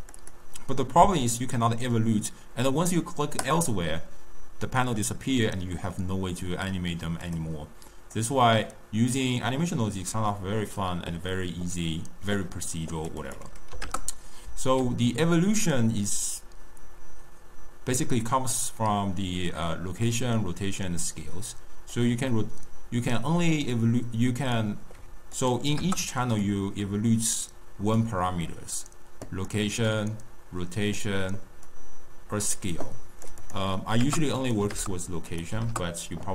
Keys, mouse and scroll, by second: 3.4 click, 7.2 click, 8.1-11.1 drag, 13.1-16.3 drag, 21.9-25.0 drag, 25.3-29.4 drag, 29.8-36.3 drag.